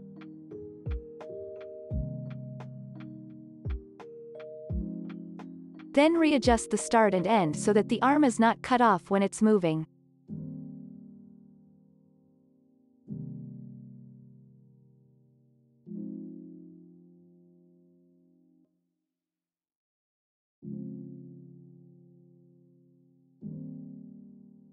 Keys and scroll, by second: 0.7 ctrl+s, 2.7 ctrl+s, 9.2 space, 16.8 ctrl+s, 21.1 u, 22.5 space.